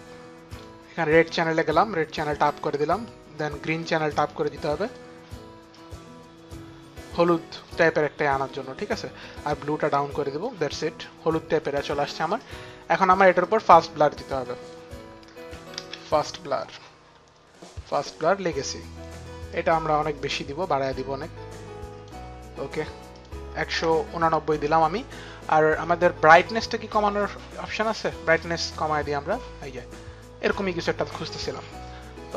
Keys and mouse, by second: 0.1 click, 1.2 click, 3.7 click, 5.4 click, 9.0 click, 10.6 click, 13.1 click, 14.1 click, 14.8-16.2 typing, 17.5 click, 19.1 click, 22.8 click, 28.0 click.